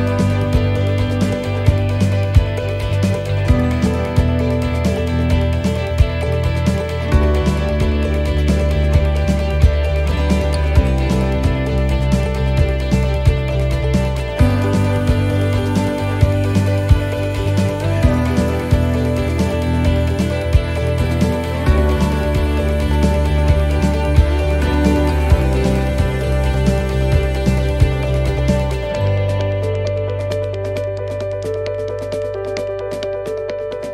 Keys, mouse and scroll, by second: 6.0 click, 9.6 click, 9.7 shift+middle click, 10.2-10.7 scroll up 9, 11.0 shift+middle click, 11.6-12.0 scroll down 1, 12.7-13.6 scroll down 3, 14.5 click, 21.8-22.7 scroll down 1, 22.7 click, 25.0 shift+d, 26.4 click, 30.3 click.